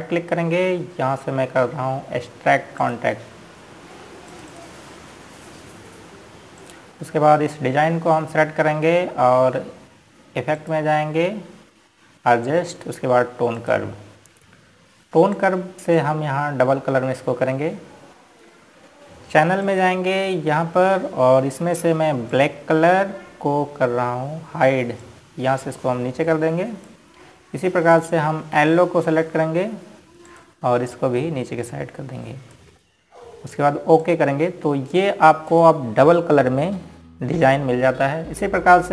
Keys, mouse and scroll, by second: 1.4 right click, 4.5 click, 7.0-7.8 scroll down 1, 8.3 click, 12.3 click, 15.3 click, 21.3 click, 24.0 click, 26.7 click, 32.0 click, 37.8-38.2 scroll up 1.